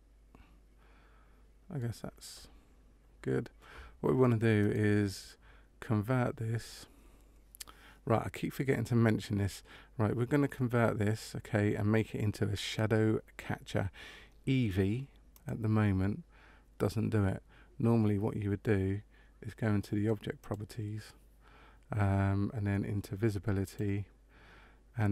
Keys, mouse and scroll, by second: 4.6 right click, 15.2 click, 20.3 click, 23.6 click.